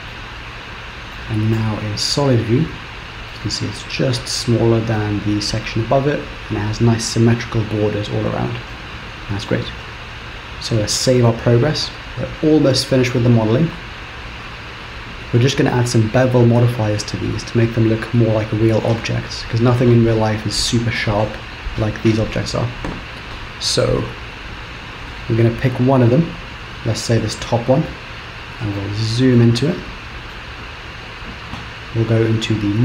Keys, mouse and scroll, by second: 0.2 middle click, 1.7 z, 2.9 scroll down 2, 3.4 middle click, 8.8 middle click, 11.3 ctrl+s, 23.9-24.3 scroll down 1, 24.3-24.9 scroll up 1, 24.9-26.4 scroll down 3, 26.4 click, 27.4 shift+middle click, 28.2-28.9 scroll up 5, 28.9 shift+middle click, 29.8 middle click, 30.6-31.7 scroll up 2.